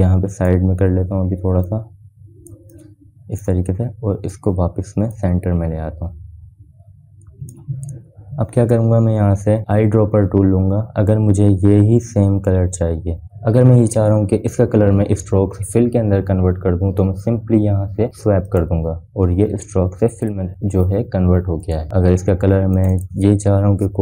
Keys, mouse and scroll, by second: 1.7-3.4 drag, 3.4-11.0 alt+shift+drag, 19.9-24.0 drag.